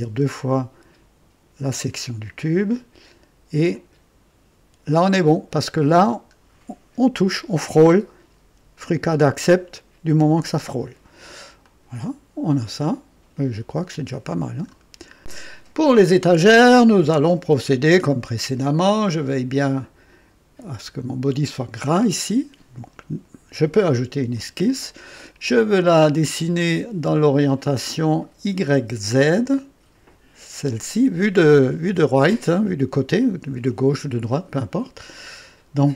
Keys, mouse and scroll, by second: 0.0 typing, 1.7 typing, 3.7 click, 4.9-5.7 drag, 6.0-6.3 scroll up 1, 6.1-6.8 typing, 8.0 scroll down 1, 10.9 scroll down 1, 11.6-14.8 drag, 14.4-15.1 typing, 15.0 scroll down 1, 15.2 Delete, 24.3 click, 25.2-25.5 scroll down 1, 26.3-27.0 right drag, 27.0-27.9 drag, 30.6 click.